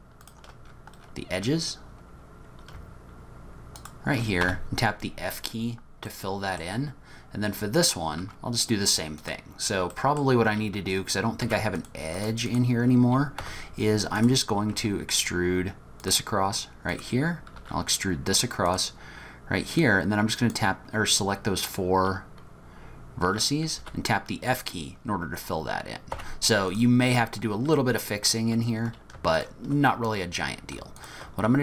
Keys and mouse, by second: 0.3 shift+click, 4.4 f, 6.1 click, 8.2 1, 9.9 middle click, 10.1 click, 11.4 2, 11.9 click, 12.2 click, 13.4 1, 14.2 click, 14.8 e, 17.6 e, 19.9 click, 23.8 f, 25.4-26.7 middle drag, 26.1 3, 26.7 click, 26.8 middle click, 27.8 click, 28.1 middle click, 31.0 shift+click.